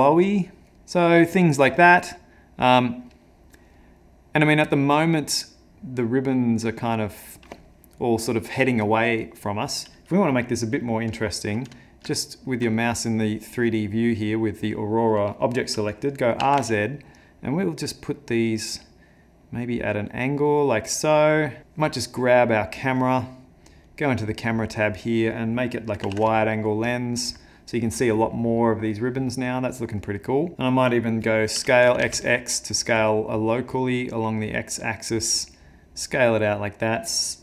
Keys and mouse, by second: 2.3 middle click, 2.3 middle click, 12.2 shift+middle click, 12.8 click, 13.7 click, 16.7 r, 22.5 click, 27.4 click, 30.5 click, 30.5 middle click, 31.6 s, 36.3 middle click.